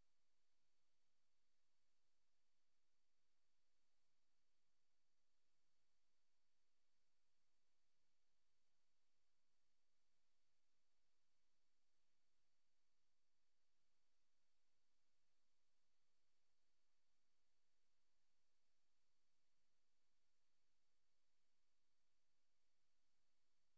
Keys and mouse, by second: 0.0-1.8 drag, 2.3 click, 3.4 click, 4.5 click, 5.4 click, 6.3 click, 7.6 click, 8.0 click, 8.5 click, 8.9 click, 9.7 click, 10.1 click, 10.9 click, 11.4 click, 12.0-13.7 drag, 14.6 click, 16.6 click, 17.2 click, 17.6 click, 18.6 click, 19.6 click, 22.0 click, 23.2 click.